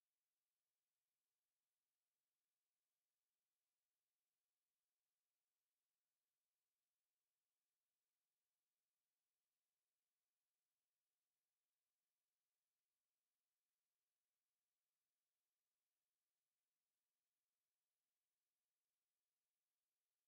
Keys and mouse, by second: 3.8-4.9 right drag, 8.0-9.4 middle drag, 12.0 middle click, 18.4 ctrl+z.